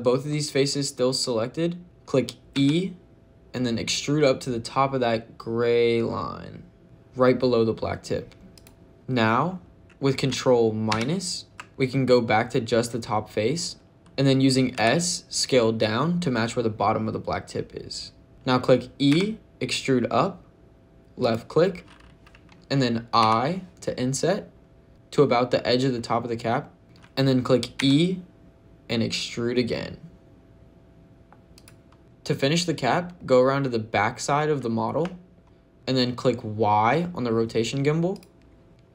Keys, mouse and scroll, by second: 2.4 e, 8.4 click, 14.1 ctrl+z, 14.1 click, 14.1 s, 14.6 s, 18.3 ctrl+z, 18.3 click, 18.3 e, 18.9 e, 21.0 click, 23.0 i, 26.8 click, 27.6 e, 31.4 click, 32.0 shift+middle click, 33.0 middle click, 34.5 shift+middle click, 34.9 middle click, 38.0 click, 38.7-38.9 scroll up 5.